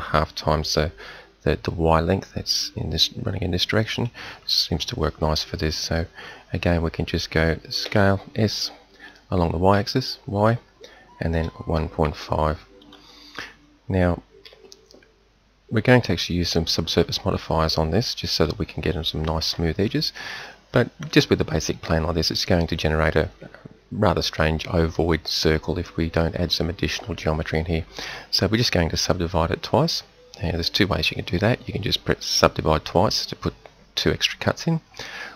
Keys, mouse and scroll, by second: 7.8 s, 14.4 t, 28.9-35.0 drag.